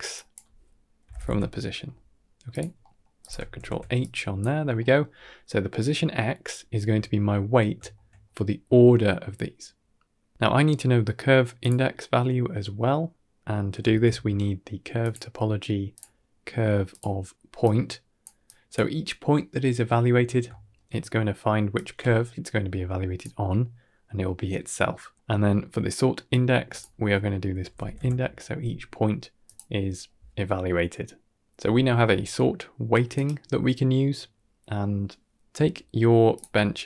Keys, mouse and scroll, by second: 0.0-2.4 drag, 2.7 middle click, 3.1 click, 3.4 ctrl+h, 3.9 click, 4.5-5.1 scroll down 3, 4.7 middle click, 5.2 middle click, 6.9-7.3 shift+middle drag, 7.5 scroll down 1, 7.7 shift+middle click, 8.0 middle click, 11.5 click, 13.7 shift+a, 17.5-18.1 drag, 18.3 click, 20.4 shift+middle click, 21.6-23.1 drag, 24.9 middle click, 26.1-29.3 drag, 35.1 middle click, 35.1 alt+shift+click, 35.1 scroll up 3, 36.2 ctrl+shift+click.